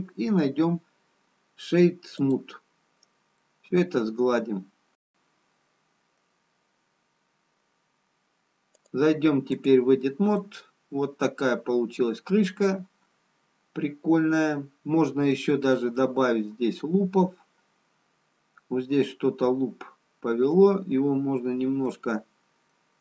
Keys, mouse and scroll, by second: 3.5 middle click, 9.8 click, 11.1 middle click, 15.2 scroll up 1, 22.6 middle click, 22.6-23.0 scroll up 2.